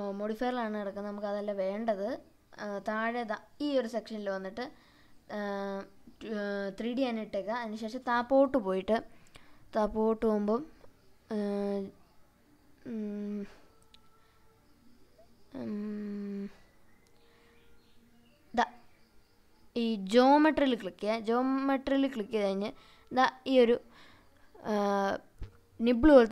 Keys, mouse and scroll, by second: 2.6 click, 3.0 click, 4.6-5.7 scroll down 1, 5.7-6.3 scroll down 1, 7.6 click, 8.2 scroll down 2, 9.0-9.7 scroll down 3, 10.8 scroll down 1, 10.9 click, 13.4 click, 15.5 click, 16.0 scroll down 2, 16.8-17.9 scroll down 3, 17.9 click, 17.9 scroll down 1, 19.0 click, 19.8 click, 20.5 click, 21.3-22.0 scroll down 2, 22.4 click, 26.0-26.3 scroll down 2.